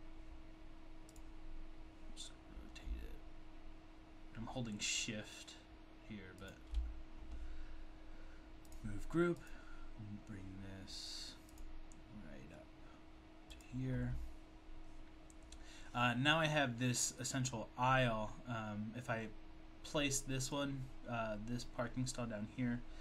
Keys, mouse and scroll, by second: 6.5 shift+click, 9.4 click, 16.0 click.